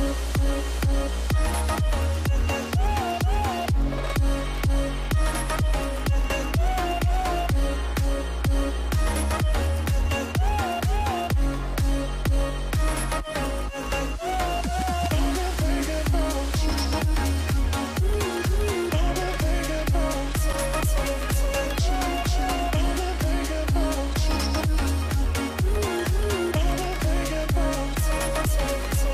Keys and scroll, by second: 4.1 Up, 4.1 v, 6.8 typing, 8.0 typing, 8.3 Return, 18.0 shift+Right, 18.3 shift+Right, 18.5 shift+Right, 24.2-26.2 typing, 27.6 typing.